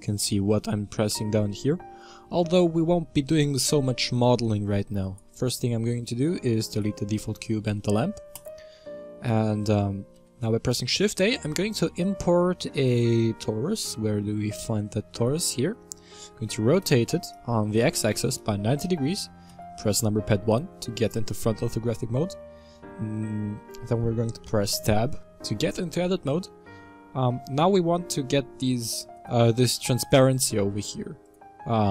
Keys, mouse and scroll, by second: 5.0 right click, 5.9-6.7 middle drag, 6.7 shift+right click, 7.6 x, 8.8-10.1 middle drag, 10.1 shift+a, 15.7 middle click, 16.3 r, 19.5 KP_1, 20.7-21.8 scroll up 5, 21.8 Tab, 28.6 click, 29.1 click, 29.9-31.4 drag.